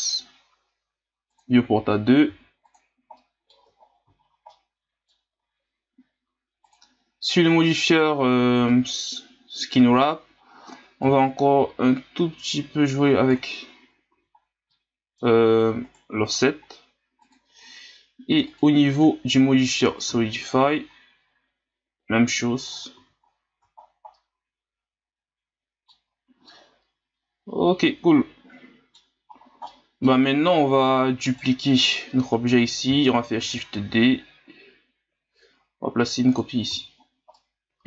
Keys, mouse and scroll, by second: 2.2 w, 3.1-3.7 middle drag, 3.7 scroll up 4, 4.5-5.3 middle drag, 5.3-6.7 scroll up 2, 6.7-9.6 drag, 11.1-13.8 drag, 13.8-14.5 scroll down 6, 14.1 a, 14.7-15.3 middle drag, 15.3-15.6 scroll up 6, 15.8 right click, 17.2-23.0 drag, 23.0 a, 23.2-23.9 scroll down 7, 24.1-26.1 middle drag, 26.1 scroll up 4, 26.5-29.5 middle drag, 29.5 scroll down 1, 29.7-30.8 middle drag, 30.8-31.3 scroll down 3, 31.3 right click, 32.6-33.4 scroll up 1, 33.4 shift+d, 36.7 a, 37.0 scroll down 2, 37.3-37.8 middle drag.